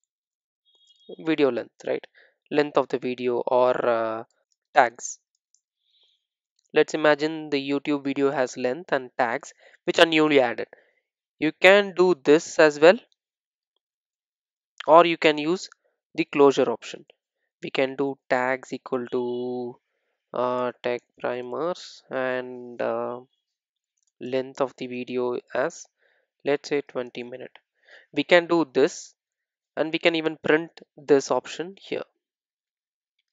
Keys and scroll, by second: 3.6 super+d, 12.0 super+d, 14.2 super+d, 15.1 super+z, 17.8 super+d, 29.6 super+s.